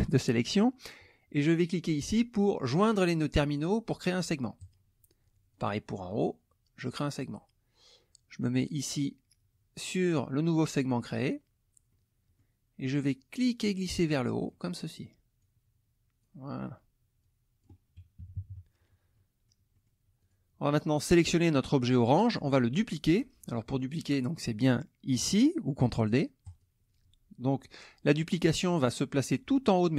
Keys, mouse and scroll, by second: 4.6 click, 5.5 click, 7.1 click, 10.9 middle click, 11.9 middle click, 13.4-14.6 drag, 15.4-16.4 drag, 17.2 click, 18.2 KP_Subtract, 19.1 middle click, 19.1-19.6 scroll down 1, 19.7 middle click, 19.7-20.0 scroll down 1, 20.2 click, 20.9 click, 26.5 click.